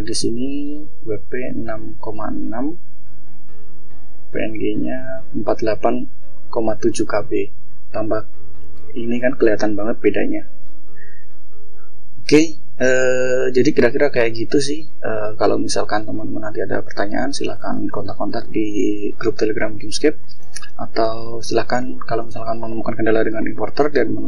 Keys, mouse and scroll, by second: 1.9 scroll down 1, 3.1 scroll down 1, 3.8 click, 12.2 click, 14.1 click, 15.4 click.